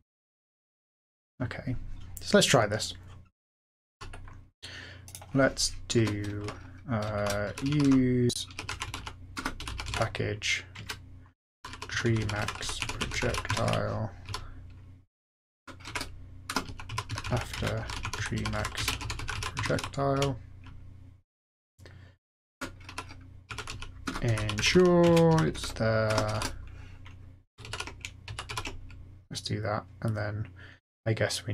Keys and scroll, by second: 3.9 super+f, 5.9 Return, 6.8-14.2 typing, 15.5 Return, 15.6-20.6 typing, 22.3-29.0 typing.